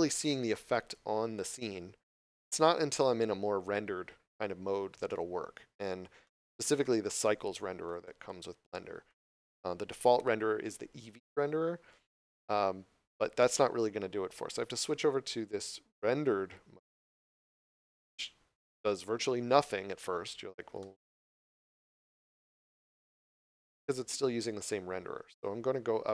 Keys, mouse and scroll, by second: 4.4 scroll up 1, 5.0 middle click, 17.1 click, 19.7 scroll down 1, 20.8 middle click, 21.7 scroll up 1, 22.4 middle click.